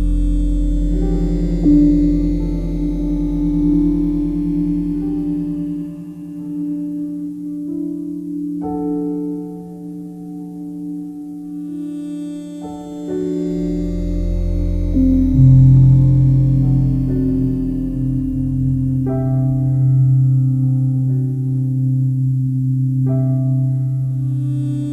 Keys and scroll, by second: 6.8 ctrl+alt+shift+e.